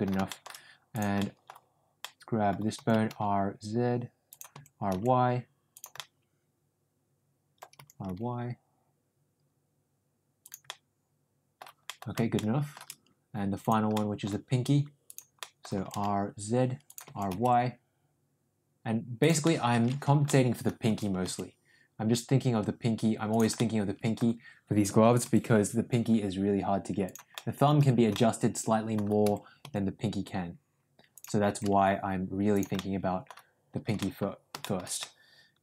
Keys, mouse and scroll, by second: 0.2 shift+middle click, 1.0 click, 1.1 middle click, 1.9-2.4 middle drag, 2.7 r, 4.5 r, 5.9-7.6 middle drag, 10.6-11.6 middle drag, 11.8 middle drag, 12.2 scroll up 1, 12.4-12.7 shift+middle drag, 13.9 middle click, 15.3 middle click, 15.7 r, 16.9 r, 19.3 middle click, 20.0 ctrl+z, 20.2 middle click, 20.8 r, 23.5 middle click, 25.1 r, 27.3-27.6 middle drag, 28.0 scroll up 1, 28.2-28.8 middle drag, 29.1 r, 31.4 r, 32.7 scroll up 1, 32.8-33.2 middle drag, 33.9 scroll up 1, 34.0 middle click, 34.5 scroll up 1, 34.6 middle drag, 34.9-35.6 middle drag.